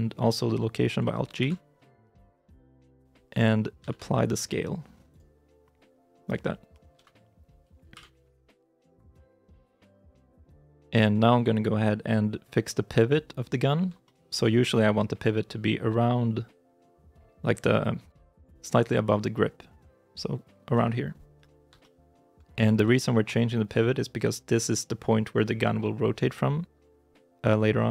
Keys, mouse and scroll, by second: 1.3 alt+g, 2.3 KP_Decimal, 3.7 ctrl+a, 6.8 KP_3, 7.8 9, 8.6 scroll up 1, 9.1 shift+middle click, 13.9 shift+middle click, 15.3-16.7 scroll up 1, 20.8-21.2 scroll up 1, 21.2-21.5 scroll down 1, 21.7 shift+i, 22.0 shift+middle click, 22.8 shift+middle click.